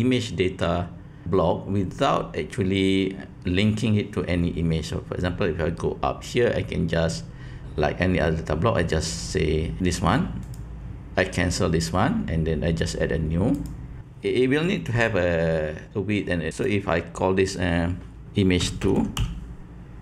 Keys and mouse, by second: 10.4 click, 13.5-20.0 drag.